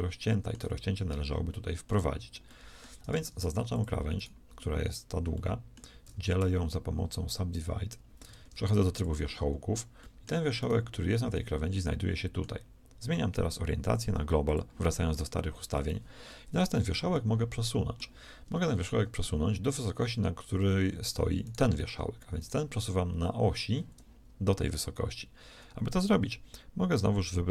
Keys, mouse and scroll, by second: 3.1 ctrl+shift+Tab, 5.9 w, 8.1 ctrl+Tab.